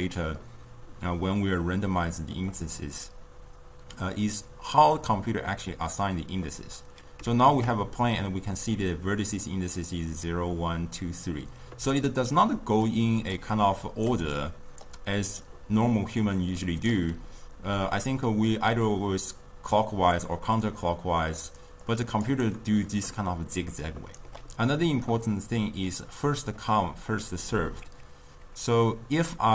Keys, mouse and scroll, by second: 13.0-15.5 drag, 15.5-18.5 right drag, 18.5-22.5 drag, 22.5-29.5 right drag.